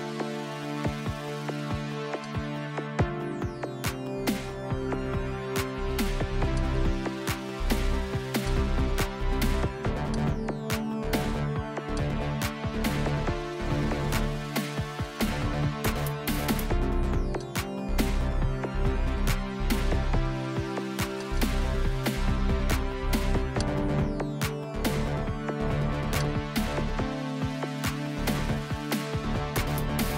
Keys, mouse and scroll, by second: 2.3-3.8 drag, 3.5 KP_2, 3.9 KP_0, 4.7 Return, 6.6 click, 8.5 click, 10.0 click, 12.0-16.6 drag, 17.4 shift+click, 21.2 click, 23.6 click, 26.2 click.